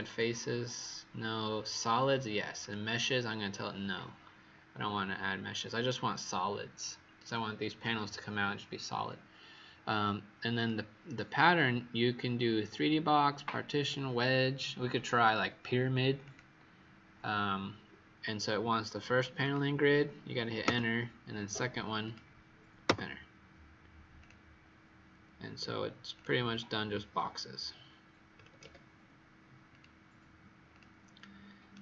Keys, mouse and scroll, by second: 20.6 Return, 22.0 click, 22.8 Return, 24.1 click, 28.3 KP_2, 28.3 KP_0, 28.6 KP_Enter, 29.6 click, 31.1 right click.